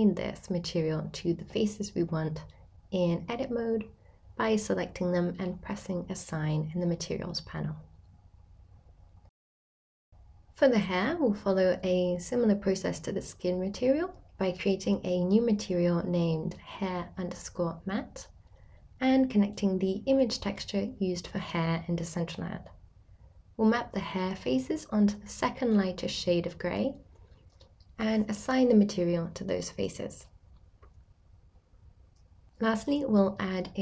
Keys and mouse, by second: 0.3 middle click, 1.0 shift+middle click, 1.3 middle click, 1.6 shift+click, 2.1 middle click, 2.5 ctrl+click, 2.7 middle click, 2.9 middle click, 3.1 shift+click, 3.2 middle click, 3.5 shift+click, 7.3 click, 9.0 click, 13.9 click, 15.5-17.0 drag, 17.0 shift+a, 20.5-22.6 drag, 23.2 click, 24.0 Tab, 25.1 a, 25.8 middle click, 27.1 a, 27.5 s, 28.9 0, 29.3 click, 30.5 g.